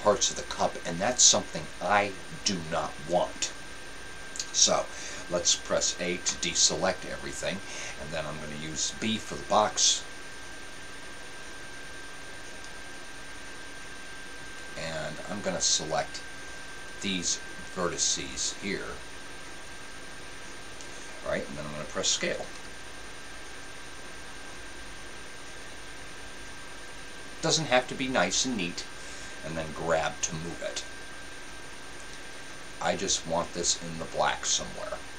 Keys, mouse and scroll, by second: 6.2 a, 22.7 s, 30.0 click, 30.0 g.